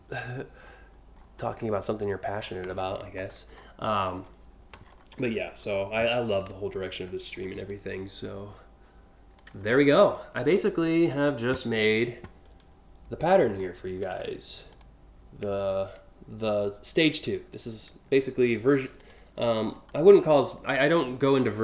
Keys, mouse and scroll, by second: 0.4-1.8 scroll up 6, 2.0-3.3 scroll down 8, 4.5-4.9 alt+scroll up 3, 7.0 click, 7.3-9.0 drag, 9.3-10.3 scroll up 4, 12.9-13.4 alt+scroll up 2, 14.3 click, 15.2 ctrl+click, 16.3 click, 18.6 click, 19.0-19.5 scroll up 3.